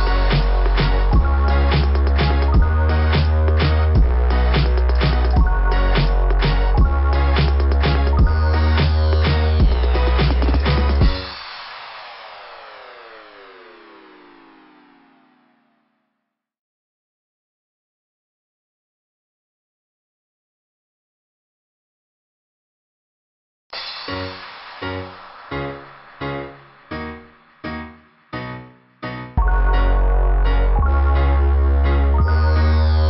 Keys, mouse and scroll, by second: 6.5 click, 6.6 click, 6.8 click, 6.9 click, 7.1 click, 7.3 click, 8.4 click, 10.1-11.0 typing, 11.0 click, 15.9 click, 16.0 click, 16.1 click, 16.3 click, 18.0 click, 18.3 click, 18.4 click, 18.6 click, 18.7 click, 19.9 scroll up 2, 26.2 scroll up 2, 27.0 scroll down 1, 28.5 scroll down 2, 29.3 [, 29.4 scroll down 1, 29.5 [, 30.0 [, 31.5 click, 31.5 typing, 32.7 click.